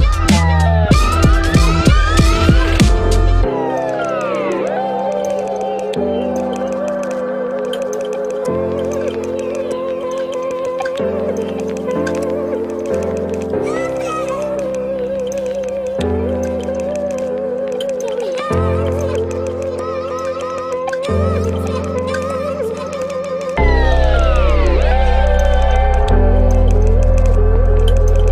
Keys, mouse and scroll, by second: 0.2 ctrl++, 10.1 ctrl+-, 10.4 ctrl+-, 15.4 ctrl+a.